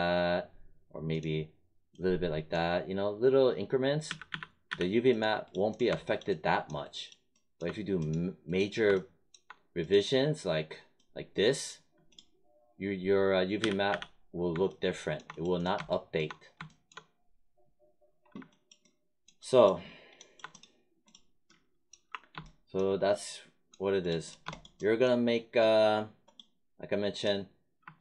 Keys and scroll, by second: 4.0 z, 13.5 z, 21.9 r.